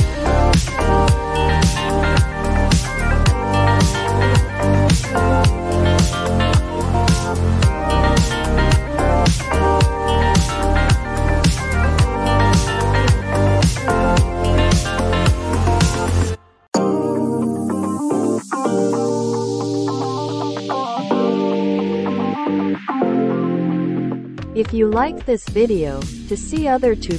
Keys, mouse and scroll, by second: 1.9 click, 4.4 click, 9.0 click, 9.7 click, 21.4-24.4 drag.